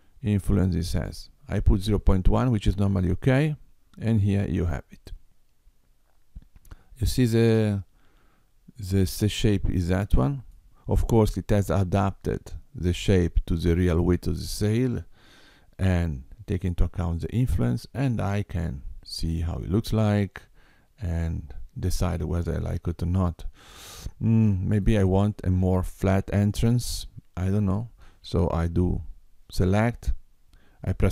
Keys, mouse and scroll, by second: 5.0 middle click, 15.5-16.6 scroll up 3, 16.6 middle click, 26.7 click, 28.6 Tab.